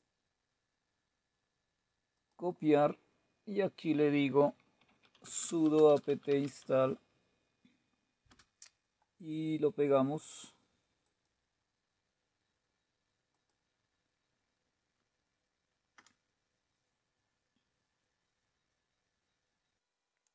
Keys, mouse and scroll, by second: 1.9-4.6 drag, 4.3-6.9 typing, 7.9 typing, 10.8-12.6 right drag, 13.0-15.6 drag, 15.6 Return, 20.2 Return.